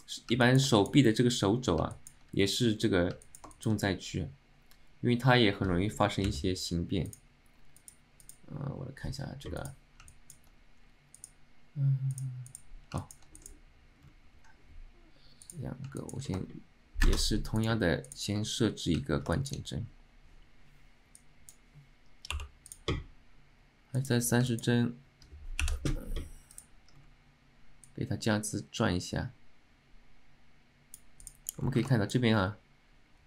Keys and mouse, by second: 0.5 alt+middle click, 0.8 shift+middle drag, 2.0 alt+middle click, 3.3 alt+middle click, 3.6 alt+shift+middle drag, 13.1 alt+shift+middle drag, 25.7 t, 26.6 click, 28.0-31.2 drag, 32.0 alt+shift+middle drag.